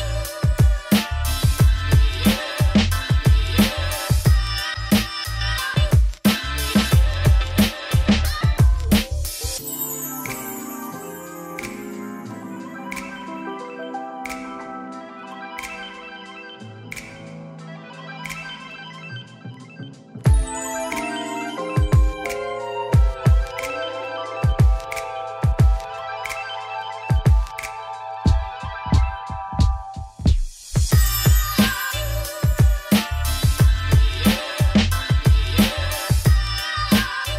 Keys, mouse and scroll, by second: 0.2 shift+middle click, 0.5-3.5 scroll up 1, 3.5-4.7 scroll up 1, 4.7-6.3 scroll up 1, 6.3-8.0 middle drag, 8.0 a, 8.6 middle click, 9.0 1, 9.1 shift+click, 9.4 middle click, 9.6 ctrl+b, 12.6-14.6 shift+drag, 14.6 middle click, 15.0 e, 18.2 KP_7, 25.8 click, 26.6 shift+middle click, 27.6 shift+click, 28.5-37.3 ctrl+drag.